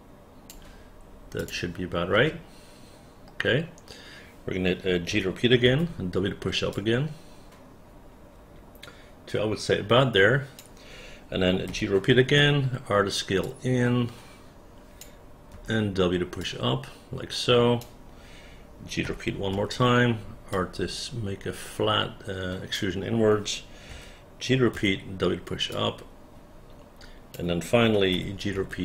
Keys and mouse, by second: 1.5 click, 2.2 space, 5.2 g, 5.8 w, 6.8-10.7 drag, 11.8 g, 12.5 r, 13.6-15.1 drag, 15.7 w, 16.6-17.9 drag, 19.2 g, 19.6 r, 20.6-22.8 drag, 24.0 g, 24.9 w, 25.8-27.5 drag, 28.2 g, 28.7 r.